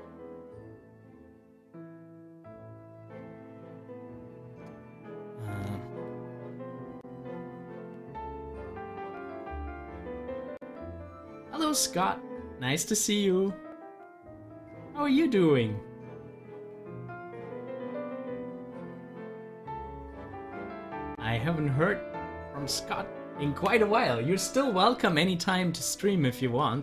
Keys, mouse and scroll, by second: 5.7 s.